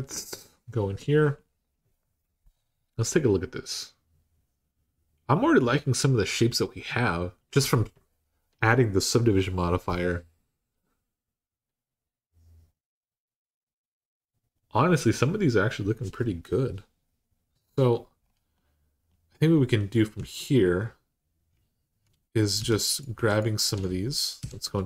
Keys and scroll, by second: 19.9 Tab, 22.4 3, 24.2 3.